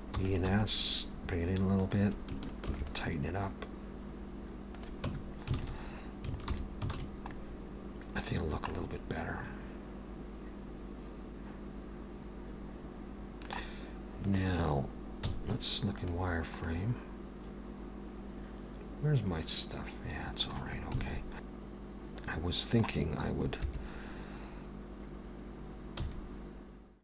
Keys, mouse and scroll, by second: 0.2 e, 0.5 s, 2.7 ctrl+r, 5.1 Tab, 5.6 alt+a, 6.5 alt+h, 6.9 alt+a, 7.3 middle click, 8.4 scroll down 1, 8.7 middle click, 14.3 click, 15.2 z, 16.6 middle click, 21.0 alt+a, 23.6 3, 25.9 c.